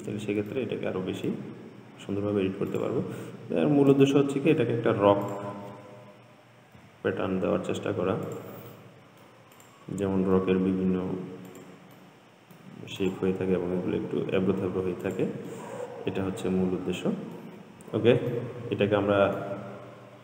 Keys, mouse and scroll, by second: 0.2 scroll down 2, 0.8-2.2 shift+middle drag, 2.2-3.0 scroll up 1, 3.0 click, 3.5-4.2 scroll up 2, 4.3-5.5 shift+middle drag, 5.5 click, 7.0 g, 9.0 middle click, 9.8 click, 10.6 g, 12.2-13.2 middle drag, 13.2 click, 14.0 g, 15.7-20.2 middle drag.